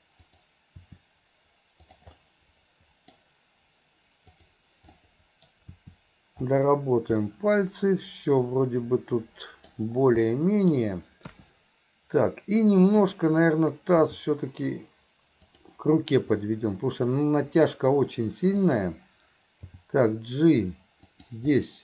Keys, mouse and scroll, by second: 0.2 click, 0.8 r, 2.2-3.2 middle drag, 4.4 click, 5.0 middle click, 5.7 r, 7.2-9.7 middle drag, 10.3-10.7 middle drag, 10.7-11.3 scroll down 1, 13.0 click, 14.0 g, 16.4 scroll up 1, 16.5-17.7 middle drag, 18.6 click, 19.7 g, 21.6-21.8 middle drag.